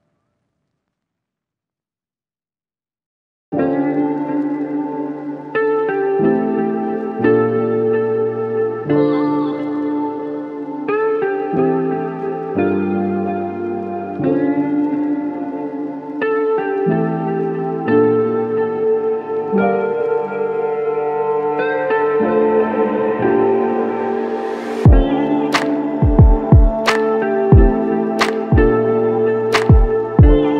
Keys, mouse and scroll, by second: 14.9 alt+click, 19.1 alt+l, 19.4 ctrl+z, 22.4 alt+click, 27.2 double click.